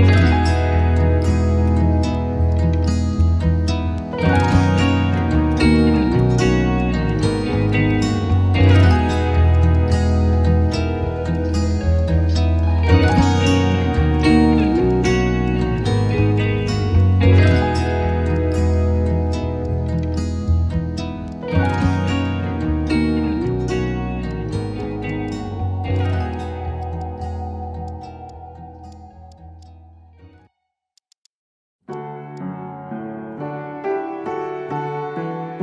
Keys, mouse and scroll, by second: 0.1 scroll up 1, 0.3 alt+middle click, 1.3 alt+click, 2.1 alt+click, 3.3 scroll up 1, 3.5 alt+middle click, 3.6 alt+click, 4.8 alt+click, 5.1 alt+click, 6.3 shift+click, 7.9 alt+click, 9.0 alt+click, 10.7 Tab, 11.3 alt+click, 11.5 alt+middle click, 14.1 Tab, 16.1 alt+click, 16.3 alt+click, 16.5 alt+middle click, 16.9 Tab, 17.5 alt+click, 17.9 Tab, 18.3 Tab, 18.7 alt+click, 19.3 Tab, 19.6 alt+click, 20.0 alt+click, 20.4 Tab, 20.9 alt+click, 22.2 alt+click, 22.7 scroll up 1, 22.8 scroll down 1, 22.9 alt+middle click, 23.1-23.4 scroll up 1, 23.4 Tab, 24.3 alt+click, 24.8 alt+click, 24.9 alt+middle click, 25.2 alt+click, 25.4 alt+middle click, 25.9 Tab, 26.3 alt+click, 27.0 alt+click, 27.9 alt+click, 28.3 alt+click, 29.6 alt+click, 30.4 Tab, 30.5 middle click, 31.0 alt+click, 31.1 alt+click, 31.2 alt+click, 32.3 Tab, 32.9 Tab, 33.6 Tab, 33.6 middle click, 33.7 Tab, 34.1 Tab, 34.1 middle click, 34.2 Tab, 34.4 Tab, 34.5 middle click, 34.5 Tab, 34.8 middle click, 34.9 Tab, 35.2 middle click.